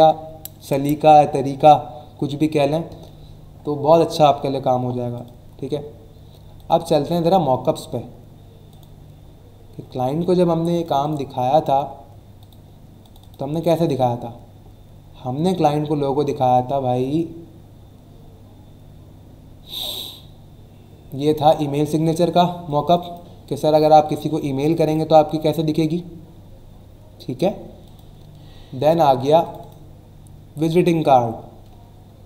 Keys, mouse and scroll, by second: 5.1 click, 5.3 click, 6.5 click, 8.7 click, 10.8 click, 12.4 click, 13.0 click, 21.1 click, 22.6 click, 24.1 click, 27.8 click, 28.0 click, 29.4 click.